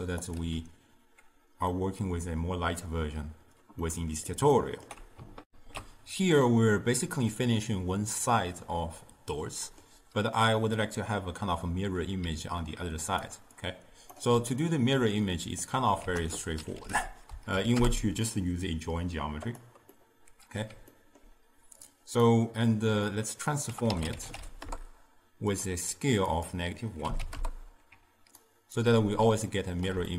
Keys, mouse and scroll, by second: 0.5 m, 1.8-5.5 middle drag, 5.5 ctrl+alt+shift+w, 8.4-11.4 middle drag, 12.3 d, 12.6-13.3 drag, 13.3-13.7 d, 13.7 click, 14.2 d, 14.6-16.1 middle drag, 16.1 ctrl+a, 20.1-21.9 middle drag, 21.9-23.3 drag, 26.4-28.4 drag, 28.4-29.6 alt+right drag, 29.6-30.1 ctrl+middle drag.